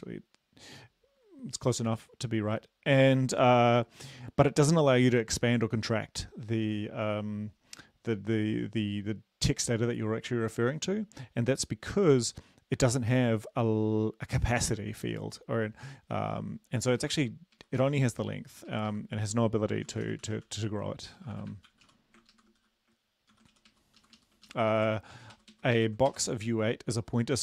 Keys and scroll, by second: 25.7 Right.